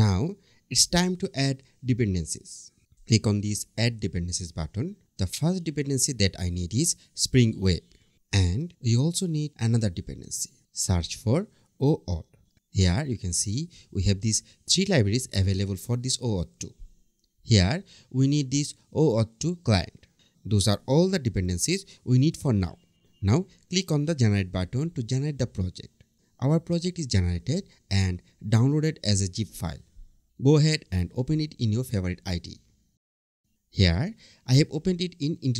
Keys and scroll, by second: 7.7 Return.